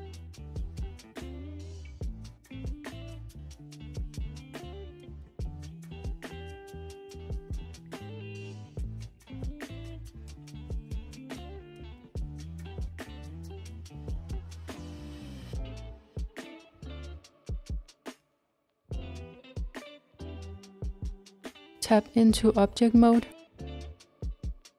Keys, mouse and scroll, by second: 1.7 click, 2.3 g, 6.2 click, 6.5 g, 9.9 click, 10.4 g, 13.7 click, 14.2 g, 16.0-16.6 scroll down 3, 16.6 scroll down 1, 17.2 middle click, 17.8 Tab, 18.2 click, 18.6-21.6 middle drag, 23.7-24.7 middle drag.